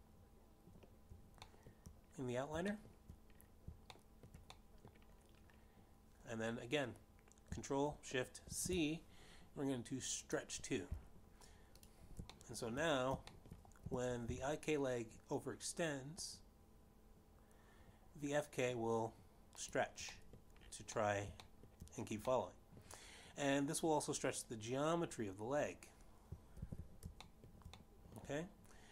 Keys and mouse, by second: 1.1 ctrl+click, 3.9 shift+middle click, 6.9 middle click, 10.6 ctrl+shift+c, 12.7 click, 14.2 click, 14.7 shift+middle click, 15.9 shift+middle click, 16.2 g, 16.6 z, 22.0 click, 22.6 middle click, 23.5 middle click, 23.9 shift+middle click, 24.7 middle click, 28.7 alt+g.